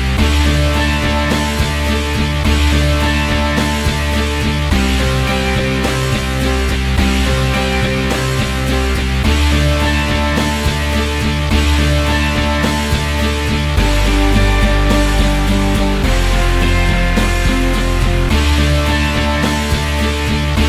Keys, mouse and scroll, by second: 1.3 click, 2.2-2.9 alt+middle drag, 2.9-4.6 alt+drag, 5.1 g, 6.5-8.6 drag, 9.4-10.7 drag, 10.7 l, 11.1 click, 11.6 KP_0, 12.4-13.4 drag, 14.0 middle click, 14.7 click, 15.4 scroll down 3, 15.6-16.0 drag, 17.2 click, 19.1 click, 19.6 scroll down 10, 19.8 alt+middle click, 20.0 click, 20.6 click.